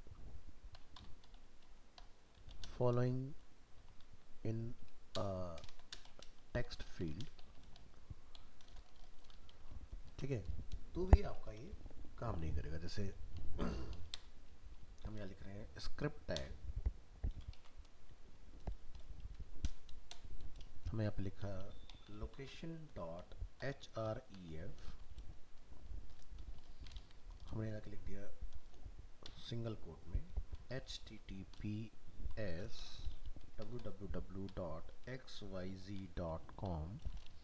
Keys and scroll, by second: 10.1 ctrl+s, 17.5 ctrl+z.